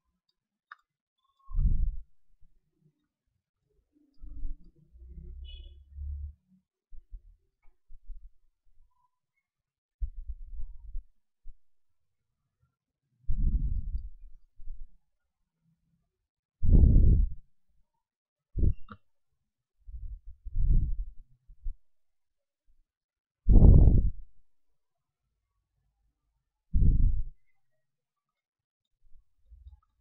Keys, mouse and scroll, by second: 0.9-3.1 middle drag, 2.5 ctrl+Tab, 3.1 right click, 3.5-7.3 drag, 3.5-6.7 middle drag, 6.7 a, 7.3 ctrl+Tab, 8.3-10.3 right drag, 8.9-19.9 drag, 10.6-12.9 right drag, 14.2-19.9 right drag, 19.9 g, 21.5-28.7 drag, 21.8-25.1 right drag, 25.7-29.1 right drag, 28.3 middle click, 29.1-30.0 drag.